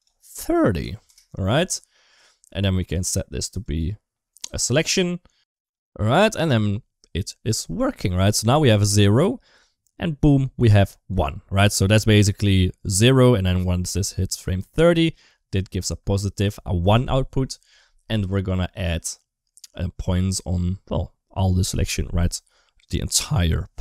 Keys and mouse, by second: 3.6 click, 4.1 click, 5.3 space, 8.5 space, 11.0 space, 12.6-15.0 drag.